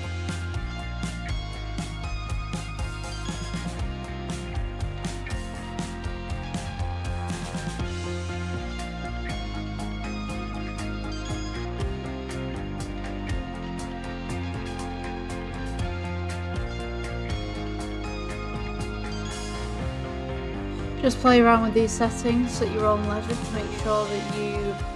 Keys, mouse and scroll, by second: 5.5 ctrl+z, 8.8-11.7 drag, 16.4 s, 17.6-18.0 scroll down 4, 20.5-23.3 drag.